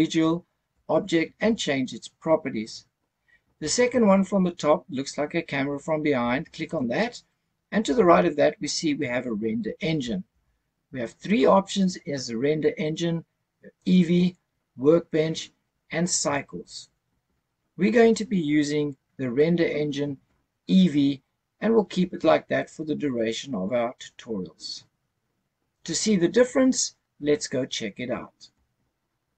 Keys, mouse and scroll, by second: 6.7 click, 13.8 click.